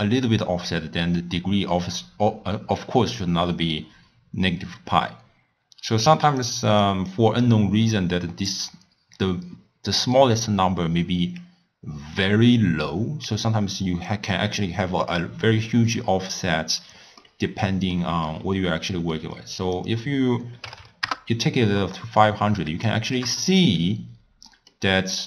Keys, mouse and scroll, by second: 0.9-3.9 middle drag, 6.0-7.0 drag, 15.2-16.8 d, 17.2-19.8 middle drag, 19.8-20.8 drag, 20.8 0, 22.2-22.9 scroll down 5, 22.9-25.2 shift+middle drag.